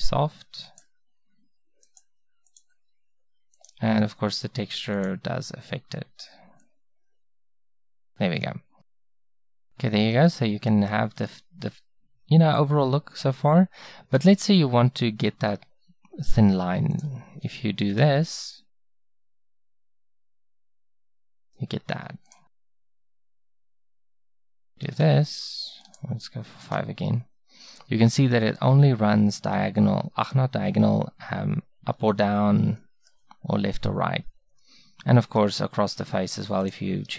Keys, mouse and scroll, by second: 9.5-17.0 middle drag, 19.4-21.4 middle drag, 32.8-37.1 middle drag.